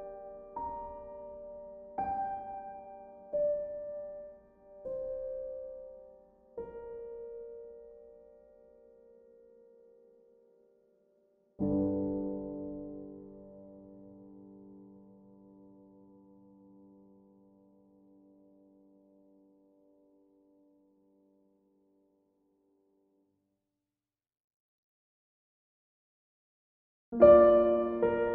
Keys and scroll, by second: 5.5 b.